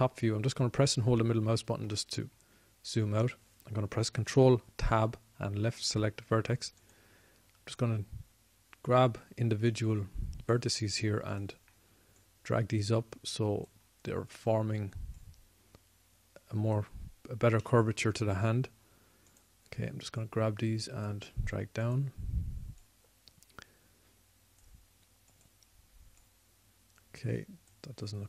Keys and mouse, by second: 0.1-1.7 middle drag, 4.1-6.0 middle drag, 6.0 ctrl+Tab, 13.2-19.4 drag, 19.4 middle click, 19.9-28.2 drag.